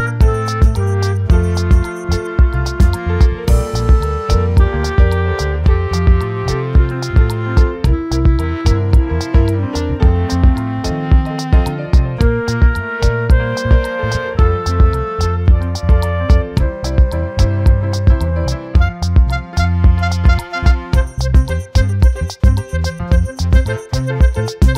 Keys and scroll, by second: 7.8 ctrl+j, 10.6 ctrl+y, 21.8 ctrl+t, 23.3 ctrl+j.